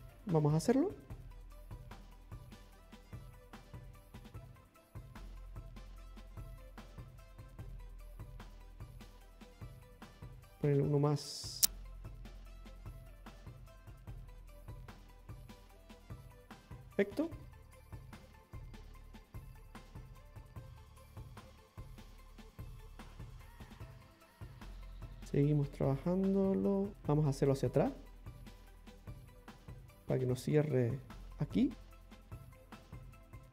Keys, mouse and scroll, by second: 0.2 middle click, 1.2 click, 1.4 click, 3.2 ctrl+click, 5.3 click, 6.6 ctrl+click, 8.9 click, 11.4 ctrl+click, 13.2 click, 15.1 ctrl+click, 16.5 middle click, 18.3-19.1 scroll up 2, 19.4 middle click, 23.2-23.6 scroll down 3, 23.7 shift+middle click, 24.3-24.8 scroll up 1, 24.8 middle click, 24.8 scroll up 1, 27.4 click, 29.1 ctrl+click, 30.5 middle click, 32.6 click.